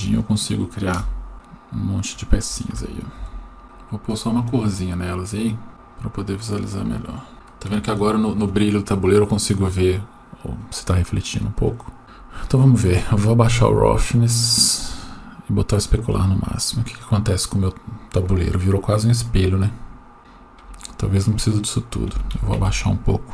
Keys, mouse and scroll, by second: 1.0 KP_0, 2.7 g, 3.6 shift+middle click, 4.1 click, 5.4 click, 7.3 shift+middle click, 11.4 click, 12.0 right click, 13.2-15.0 drag, 15.6 click, 21.3-22.6 drag.